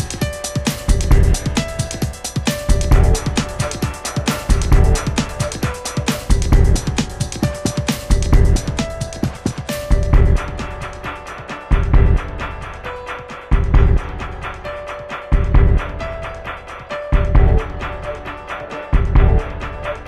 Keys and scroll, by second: 0.1 super+a, 6.1 super+a.